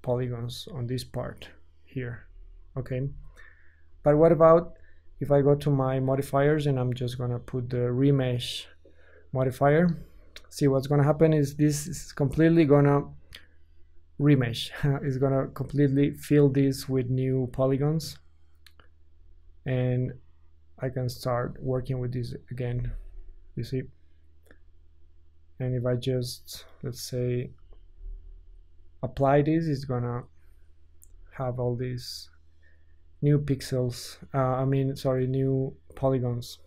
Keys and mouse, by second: 2.2 Tab, 2.9 ctrl+z, 3.9 Tab, 4.9-36.6 drag, 21.5 ctrl+z, 31.0 Tab.